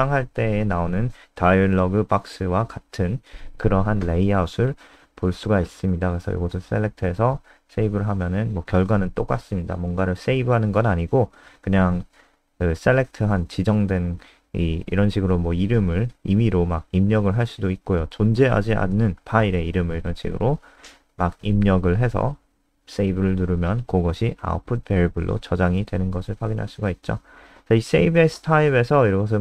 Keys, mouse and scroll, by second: 3.5 click, 12.7 click, 13.1 click, 13.4 F5, 15.7-18.8 typing, 21.6-22.9 typing, 23.2 Return, 25.2 click, 26.1 F5, 28.0 click.